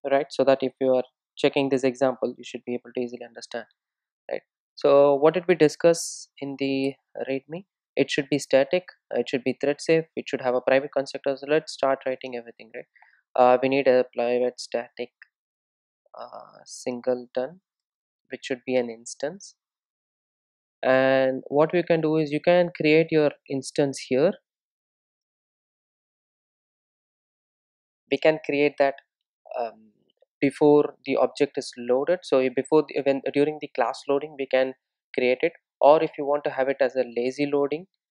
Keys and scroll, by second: 6.1 super+e, 10.9 super+e, 13.2 Return, 26.4 Return.